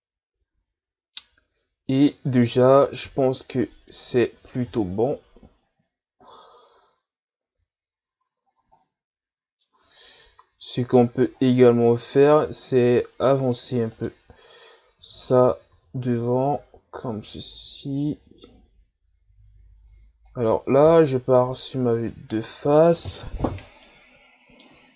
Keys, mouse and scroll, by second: 3.0 KP_3, 4.0-4.7 scroll down 2, 4.7 KP_1, 5.7-7.2 ctrl+scroll up 7, 8.4-8.8 shift+scroll up 4, 8.8-13.4 middle drag, 13.4 right click, 14.0 right click, 15.0 Tab, 15.5 a, 15.7 a, 16.4-20.8 drag, 20.8 KP_1, 22.0-23.2 scroll down 3, 23.2-23.9 scroll down 1, 23.9-24.9 middle drag.